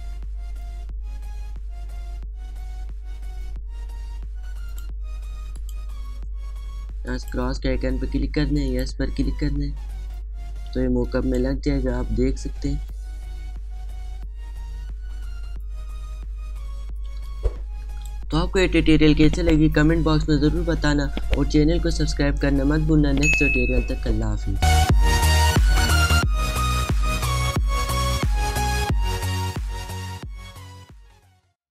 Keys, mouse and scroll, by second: 11.6 space, 11.8 click, 12.6-13.3 alt+scroll up 1, 14.6 alt+scroll down 1, 16.0 alt+scroll up 1, 17.0 alt+scroll down 1, 17.1-17.5 alt+scroll up 1, 17.5 alt+scroll down 1, 18.0 space, 18.1 click, 18.5 space, 24.6 alt+scroll down 2, 25.2-25.7 alt+scroll up 1, 26.2-26.6 alt+scroll up 1, 26.6 space, 26.6 click, 27.0 space.